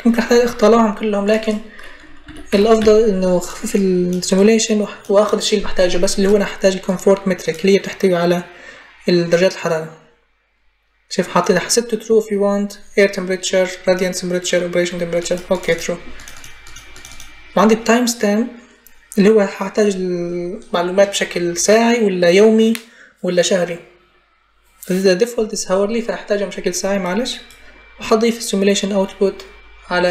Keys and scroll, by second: 1.8-3.1 typing.